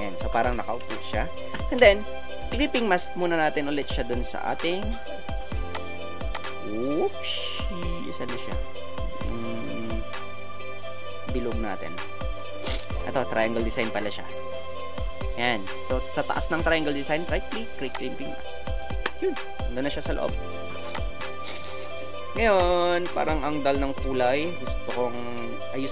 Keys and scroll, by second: 0.2 Return, 0.6 Up, 0.8 Up.